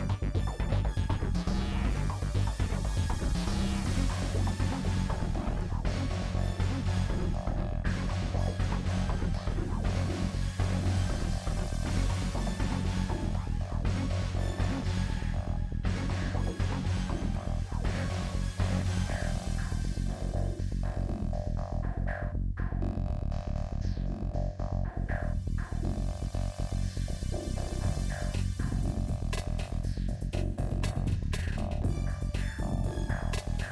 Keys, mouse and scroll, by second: 1.4 scroll down 1, 1.7 click, 2.6 scroll up 2, 2.7 shift+middle click, 3.5 scroll up 1, 3.7 click, 4.2-4.7 scroll down 4, 4.3 shift+middle click, 4.7 click, 5.0 scroll up 4, 5.3 shift+middle click, 6.1 s, 7.1-7.6 scroll up 2, 8.3 click, 8.9 scroll up 2, 9.1 shift+middle click, 9.6 shift+click, 10.5 shift+middle click, 10.7 shift+click, 11.1 shift+click, 11.5 scroll down 1, 11.6 shift+middle click, 12.4 shift+click, 12.8 shift+middle click, 13.1 shift+click, 14.0 shift+middle click, 14.7 s, 15.7-16.2 scroll down 1, 16.7 shift+click, 17.7 shift+middle click, 17.9 shift+click, 18.1 shift+click, 18.5 shift+click, 18.8 shift+middle click, 19.2 scroll down 1, 19.5 s, 21.6 shift+middle click, 21.7 shift+click, 22.1 shift+click, 24.3 click, 25.3 shift+click, 25.7 shift+middle click, 26.0 shift+click, 26.3 scroll down 2, 26.8 shift+middle click, 26.9-27.3 scroll up 1, 27.3 shift+click, 27.5 middle click, 28.5 ctrl+z, 28.6-30.9 middle drag, 32.3 middle click, 33.6 click.